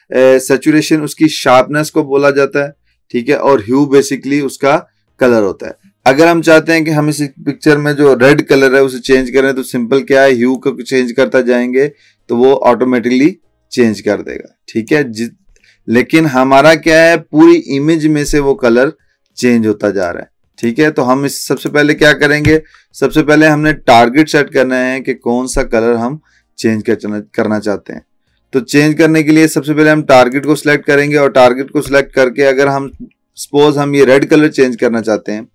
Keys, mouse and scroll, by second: 10.6-14.9 drag, 20.1-20.7 drag, 30.4 click, 32.0-32.3 alt+scroll up 1.